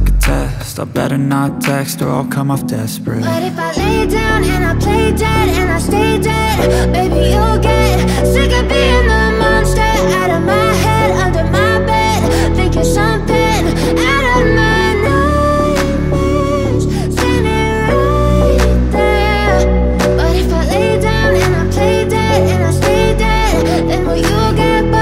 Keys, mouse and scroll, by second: 2.3 click, 5.4 click, 6.8-16.9 drag.